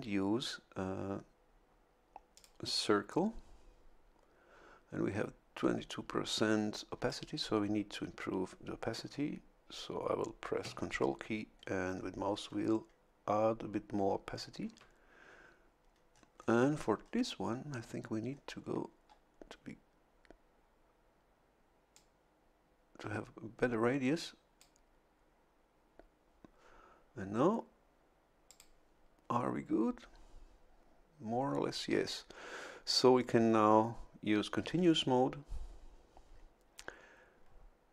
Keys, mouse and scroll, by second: 2.3 click, 11.5-12.9 ctrl+scroll up 8, 16.1-17.5 scroll up 2, 18.3-18.8 scroll up 2, 21.9-24.8 drag, 28.5 click.